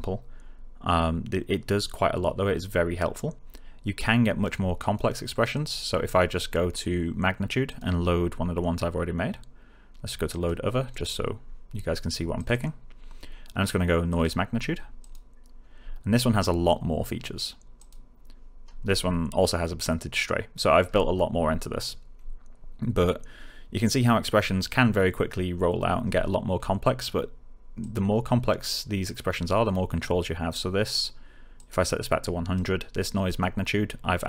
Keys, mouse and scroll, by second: 4.7 click, 7.6 click, 10.2 click, 17.7 click, 20.8-21.1 scroll down 1, 21.4-23.2 scroll up 1, 26.0 scroll down 1, 27.8 click, 31.5-32.8 click.